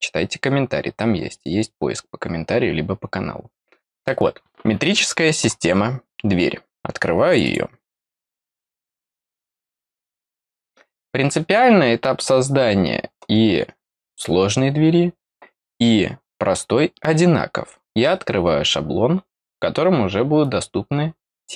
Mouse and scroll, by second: 7.3 click, 7.4 click.